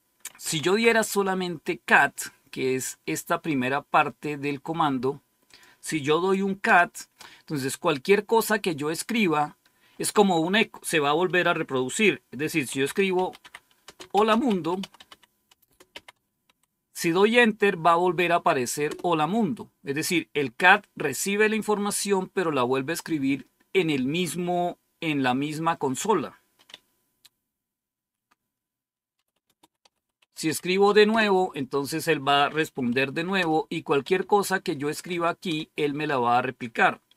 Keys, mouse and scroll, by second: 0.1-1.2 typing, 5.4 click, 6.2 click, 6.6 Return, 12.3-16.9 typing, 18.8 typing, 28.8-31.2 typing, 32.3-35.4 typing.